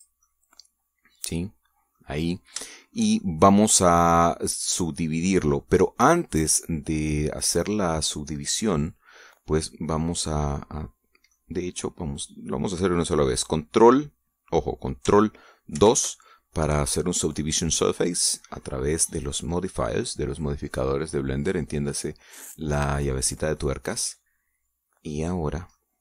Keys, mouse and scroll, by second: 0.6 click, 0.9-2.8 middle drag, 2.9 scroll up 1, 3.4-8.2 shift+middle drag, 8.4-8.8 scroll down 1, 9.1-12.2 middle drag, 12.3 scroll up 1, 16.4 ctrl+2, 19.9 click, 24.2-24.5 scroll up 1, 24.7-25.9 middle drag.